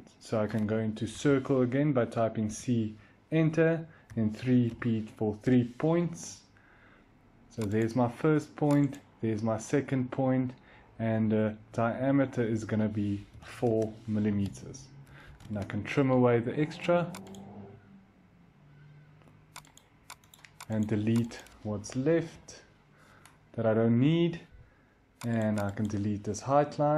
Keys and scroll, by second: 1.0 c, 2.3 Return, 4.0-4.5 typing, 5.3 Return, 13.2 4, 13.5 Return, 14.7-15.6 typing, 18.2-18.9 typing, 22.2 Delete.